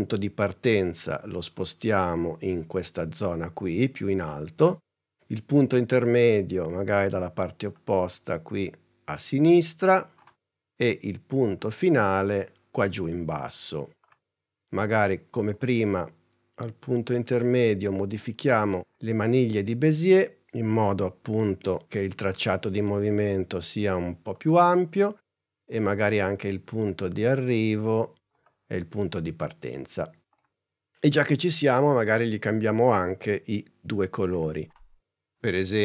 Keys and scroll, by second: 34.5 u.